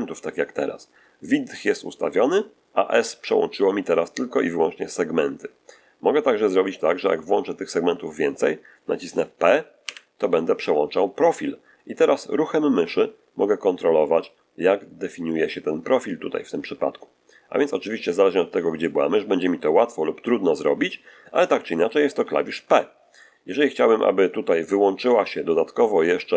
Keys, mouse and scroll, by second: 9.8 p.